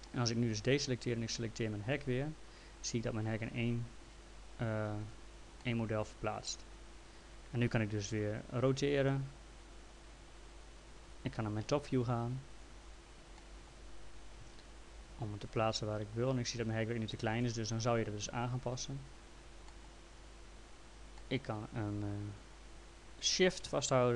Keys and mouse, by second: 0.3 click, 1.7 click, 2.5 click, 4.9 ctrl+z, 5.7 alt+middle click, 7.2 click, 8.2 e, 9.3 click, 13.4 middle click, 14.4 w, 15.5 click, 19.7 middle click, 21.2 middle click, 23.9 shift+click.